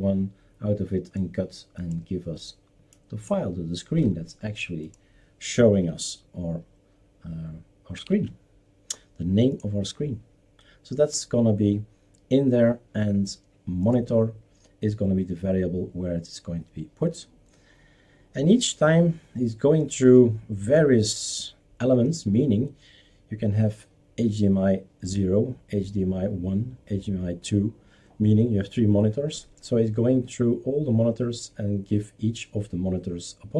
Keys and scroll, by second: 8.2 shift+super+q.